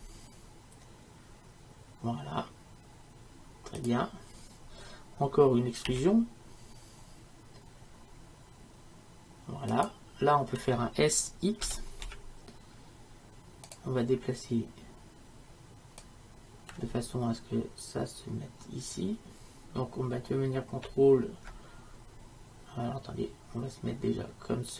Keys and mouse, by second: 5.9 e, 11.7 s.